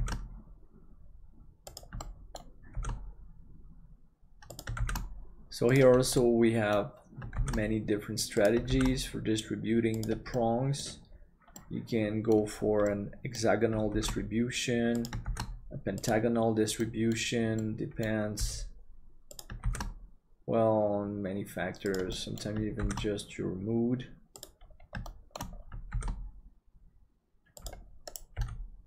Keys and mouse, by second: 2.0 middle click, 6.3 middle click, 10.3 middle click, 11.6 middle click, 12.8 middle click, 13.9 shift+d, 16.8 middle click, 17.6 middle click, 18.4 g, 19.6 shift+d, 22.2 middle click, 22.9 shift+d, 25.1 shift+middle click, 25.9 shift+d, 28.3 g.